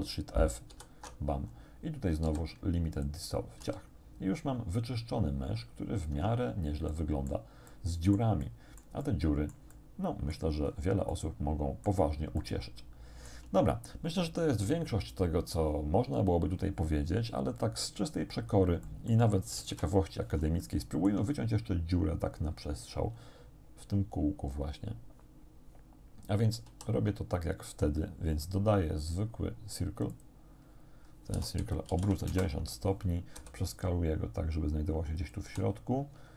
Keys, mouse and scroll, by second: 0.7 ctrl+alt+shift+f, 1.5 ctrl+alt+shift+scroll down 2, 2.3 x, 3.0 click, 3.7 a, 6.1 Tab, 6.5 scroll down 2, 6.9 click, 7.7 click, 9.9 click, 10.7 scroll up 1, 11.1 click, 12.4-13.5 shift+drag, 18.9 click, 19.7 1, 20.7 shift+click, 26.7 shift+a, 30.1 click, 31.3 r, 31.6 x, 31.9 9, 32.3 Return, 33.4 s, 35.2 click, 35.5 z.